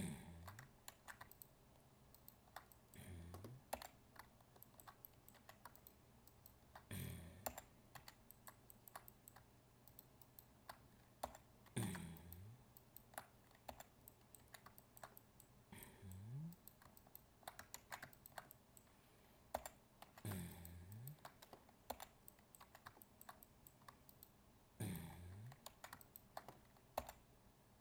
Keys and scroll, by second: 0.9 ctrl+z, 17.7 ctrl+z, 25.6 ctrl+z.